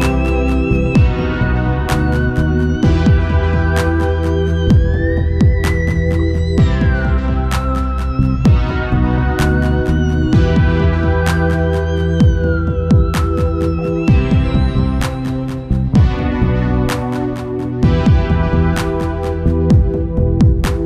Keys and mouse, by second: 0.8-2.9 middle drag, 3.4-5.5 right drag, 4.3-5.9 drag, 5.5 KP_1, 6.5 KP_3, 7.4-10.7 drag, 12.2-14.0 drag, 12.2-13.8 right drag, 14.2-17.6 drag, 18.2-20.0 drag, 18.7 ctrl+s, 20.0-20.8 middle drag.